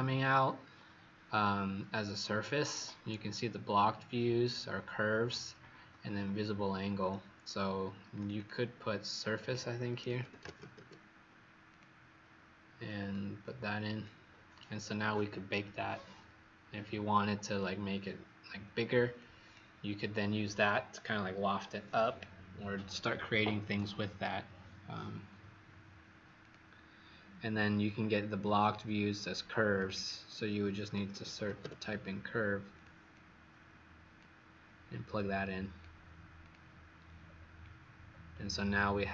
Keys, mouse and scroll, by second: 8.1 click, 8.3 click, 8.3-11.2 typing, 11.6 click, 13.3 click, 19.1 click, 29.8 click, 30.6-32.0 typing, 32.7 click, 33.0 click, 35.0 click, 37.2 scroll down 2, 38.0-39.1 scroll up 2.